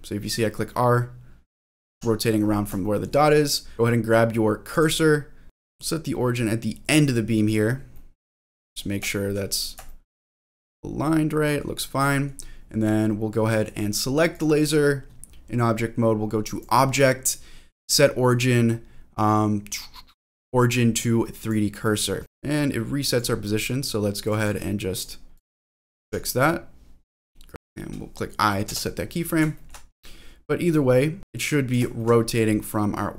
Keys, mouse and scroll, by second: 1.6 click, 1.9 ctrl+z, 2.1-2.5 scroll down 2, 2.8 shift+middle click, 3.2-3.7 scroll down 1, 4.7 click, 5.4 click, 5.4 shift+middle click, 5.4-5.8 scroll up 1, 6.9 click, 7.9 middle click, 8.7 scroll up 2, 9.1 shift+middle click, 9.5 scroll up 1, 9.9 shift+middle click, 10.3-11.6 middle drag, 11.7 scroll down 1, 12.1 middle click, 14.3 click, 14.5 click, 16.4-21.5 drag, 22.2 click, 22.2 middle click, 22.2 scroll down 4, 24.2 click, 25.3 click, 26.0 ctrl+z, 26.4-27.5 drag, 27.5 shift+middle click, 27.5-28.6 scroll down 4, 28.6 i, 29.5 shift+middle click, 29.9-30.8 scroll down 1, 30.8 click, 31.2 ctrl+z, 32.0 shift+middle click, 32.3-33.1 scroll down 1.